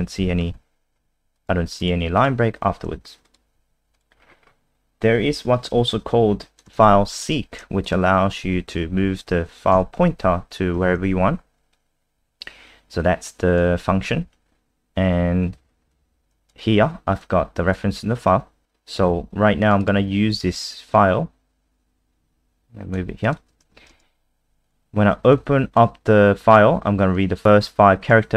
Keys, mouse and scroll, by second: 0.5 Down, 1.3 click, 2.2 click, 3.2 click, 3.5 alt+F4, 3.9 click, 4.1-5.2 scroll down 5, 5.2 click, 6.7 ctrl+c, 7.2 click, 7.8 shift+click, 8.6 shift+Up, 9.7 ctrl+v, 11.0 ctrl+s, 13.0 click, 19.8 click, 20.9 click, 24.6 click.